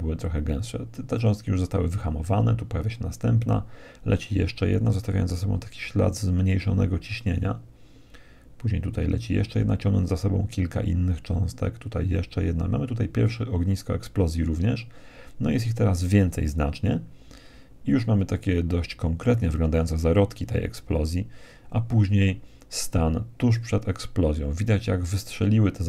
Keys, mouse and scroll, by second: 1.3 Right, 6.4 Right, 9.8 Right, 13.0 Right, 19.8 Right.